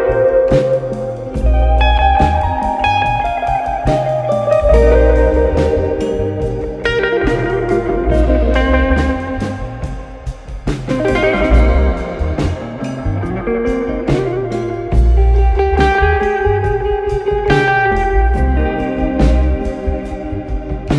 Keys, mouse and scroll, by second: 0.1 click, 1.2 alt+click, 3.3 drag, 4.1 click, 4.7 click, 5.6 click, 6.0-8.9 drag, 12.5 click, 14.0 alt+click, 15.5 KP_1, 16.9 ctrl+KP_1, 17.7 scroll, 18.8-19.5 drag, 20.8 click.